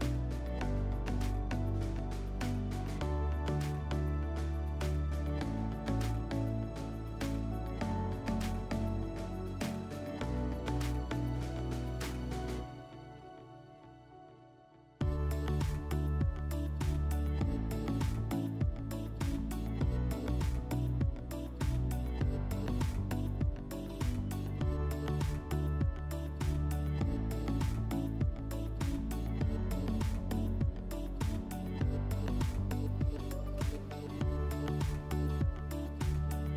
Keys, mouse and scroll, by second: 1.0 click, 1.1 click, 2.1-3.0 typing, 5.1-5.6 middle drag, 5.6 scroll, 5.9 middle click, 6.5-7.7 drag, 8.0-10.4 drag, 11.2-12.7 drag, 15.9 click, 18.0-21.0 typing, 18.9 Tab, 20.2 Tab, 21.4 Return, 24.6-26.6 drag, 30.1 middle click, 30.9-34.8 drag.